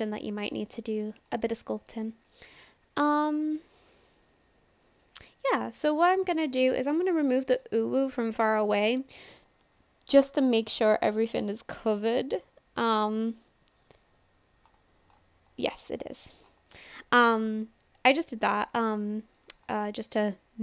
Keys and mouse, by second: 0.2-1.3 middle drag, 2.1 shift+middle click, 2.7-4.2 middle drag, 5.0-5.5 middle drag, 6.0-6.4 shift+middle drag, 6.6 middle click, 7.4 shift+middle click, 7.8-8.9 middle drag, 13.4 click, 15.8-16.2 shift+middle drag, 16.9-17.3 shift+middle drag, 17.5-18.6 middle drag, 18.9-19.4 shift+middle drag, 19.8 shift+middle click, 20.3 click.